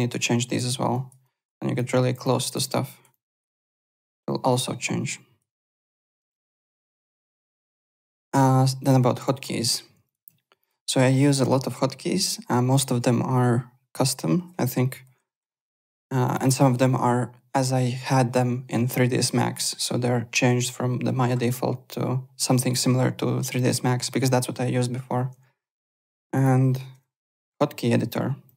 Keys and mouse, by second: 0.3 alt+right click, 0.9 alt+right click, 1.5 alt+click, 1.8 alt+right click, 2.2 alt+click, 2.6 alt+right click, 3.1 alt+click, 3.4 alt+right click, 4.1 alt+right click, 5.5 alt+right click, 6.3 alt+Tab, 6.8 alt+click, 8.8 click, 10.0 click, 10.2 alt+Tab, 10.6 alt+click, 16.2 alt+click, 25.3 alt+Tab, 25.8 alt+Tab, 26.0 alt+click, 26.9 Home, 28.4 click.